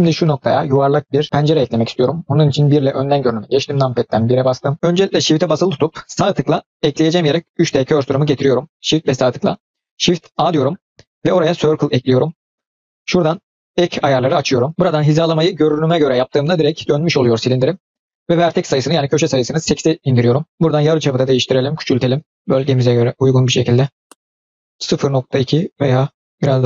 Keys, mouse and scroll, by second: 2.4 KP_1, 3.7-4.2 scroll up 1, 4.3-4.7 shift+middle drag, 7.2 shift+right drag, 10.3 shift+a, 13.5 click, 15.1 click, 18.1-20.5 drag, 21.1-26.6 drag.